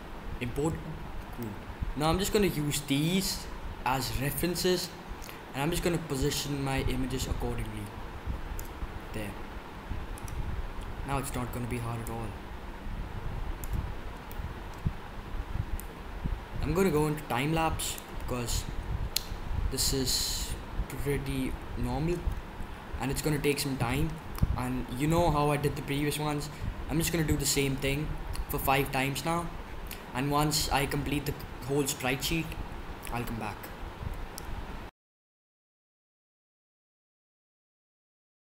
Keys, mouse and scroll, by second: 0.8-5.1 middle drag, 6.2-8.1 drag, 8.1-9.1 middle drag, 11.8-13.6 middle drag, 13.6 drag, 13.7-15.7 middle drag, 15.7 click, 20.6-27.9 middle drag, 35.0 middle click, 35.2 KP_7, 35.4 click, 35.6 drag, 35.9 click, 36.3 middle click, 36.6 middle drag, 37.1 middle click, 37.5 middle click, 37.9-38.2 drag, 38.0-38.4 typing, 38.3 drag.